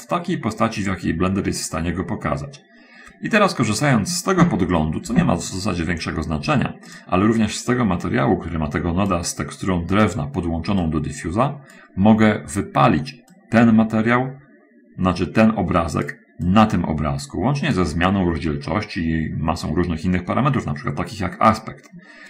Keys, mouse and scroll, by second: 7.3 click, 7.7-9.3 drag, 11.1-12.2 drag, 13.8-16.6 drag.